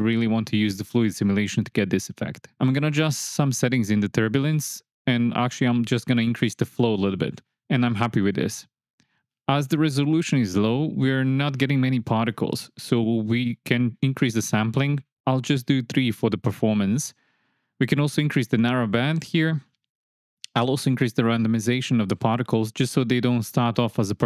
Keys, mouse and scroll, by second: 2.9 click, 4.0 click, 5.5 click, 7.3 shift+Left, 7.5 space, 15.1-16.9 drag, 19.0-20.3 drag, 22.2-24.2 drag.